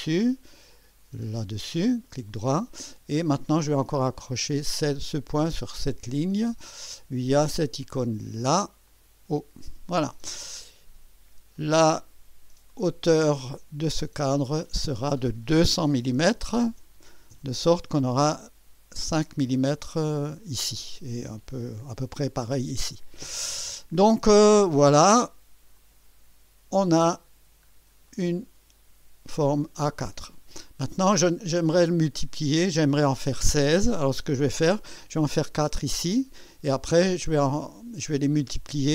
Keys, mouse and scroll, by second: 1.4 click, 2.1 right click, 4.2 click, 5.6 click, 8.9 click, 11.6 click, 14.5 click, 15.9 2, 16.2 KP_0, 17.4 KP_Enter, 25.8 click, 26.7-27.4 scroll down 3, 27.7 scroll up 1, 28.1 right click, 31.5 scroll down 1.